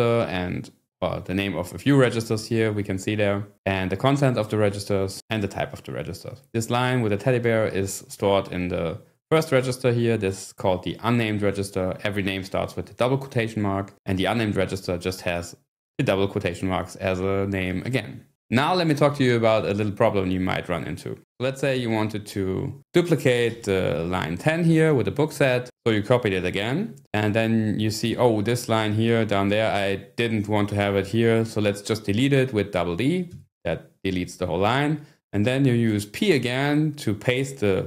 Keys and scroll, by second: 23.5 y, 28.8 scroll down 1, 33.1 d, 33.3 d.